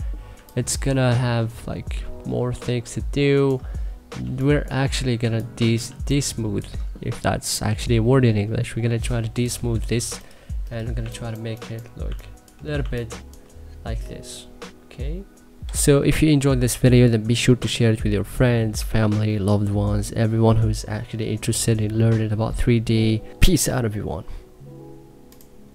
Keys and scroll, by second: 5.5 3, 8.4 3, 10.6 1, 11.7 2, 15.4 2.